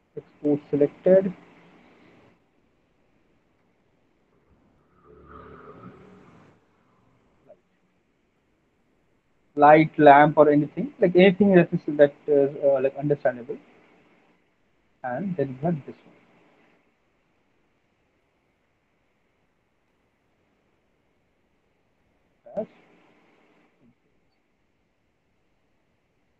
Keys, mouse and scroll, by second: 0.4 click, 1.7 click, 2.6 click, 3.1 click, 3.6-8.2 typing, 8.6 click, 10.4 click, 12.1 alt+middle click, 12.2 middle click, 12.5 middle click, 12.7 alt+middle click, 13.1 click, 13.7 click, 14.5 right click, 15.1 click, 16.8 alt+middle click, 17.0 middle click, 17.0 alt+middle click, 17.4 click, 17.4 middle click, 19.2 click, 20.2 click, 20.2 right click, 22.3 click, 22.3 right click, 25.6 click, 26.2 alt+middle click.